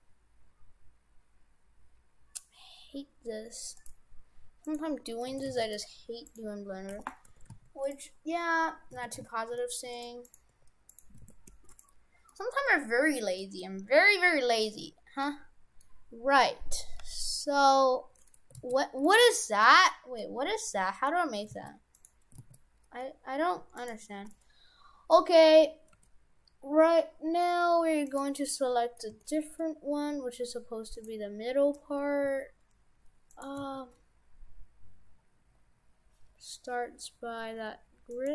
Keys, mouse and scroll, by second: 4.7 right click, 5.0 Tab, 5.4 shift+f, 6.3 right click, 7.4 shift+f, 9.1 shift+f, 10.3 right click, 10.6 Tab, 11.0 right click, 11.2 shift+f, 12.3 middle click, 13.9-15.4 scroll down 8, 15.3 middle click, 16.2-17.0 scroll up 1, 17.0 scroll up 1, 17.0 g, 19.2 w, 22.4 ctrl+z, 23.8 right click, 24.4 middle click, 25.9 g, 28.4 middle click, 29.1 g, 32.3 s, 33.6 s.